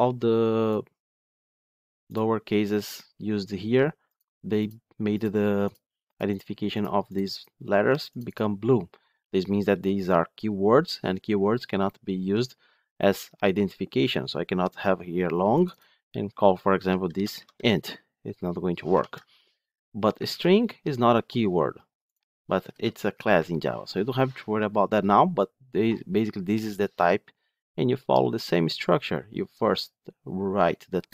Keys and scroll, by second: 18.9 ctrl+z, 21.3 ctrl+Tab.